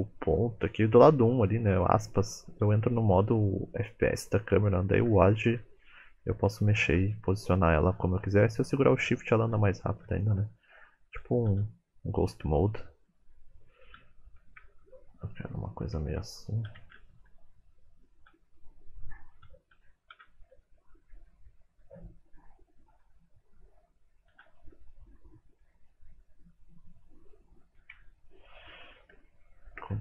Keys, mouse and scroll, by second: 27.0 click, 27.7 KP_1, 27.9 KP_Decimal, 28.8 shift+middle click, 29.1 scroll up 4, 29.7 ctrl+Tab, 29.7 scroll up 1.